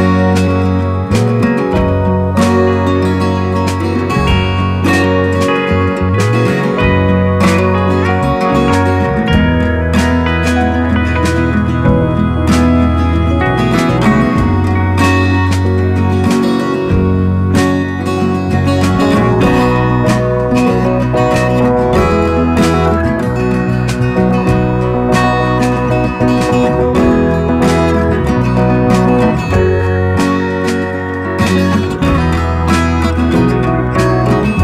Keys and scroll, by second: 1.0 ctrl+d, 22.6 ctrl+[.